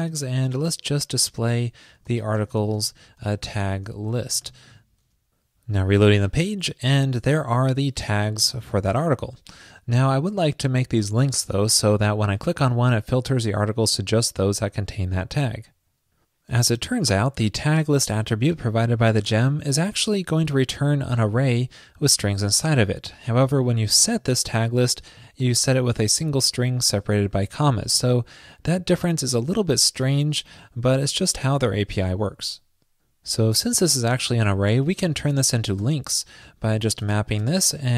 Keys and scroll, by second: 0.7 ctrl+shift+>.